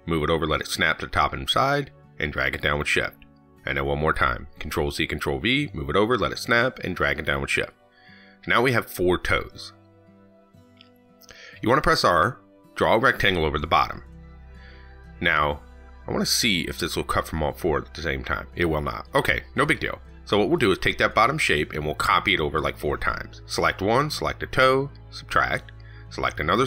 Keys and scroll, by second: 4.5 ctrl+c, 4.7 ctrl+v, 20.0 ctrl+z, 22.1 ctrl+c, 22.3 ctrl+v.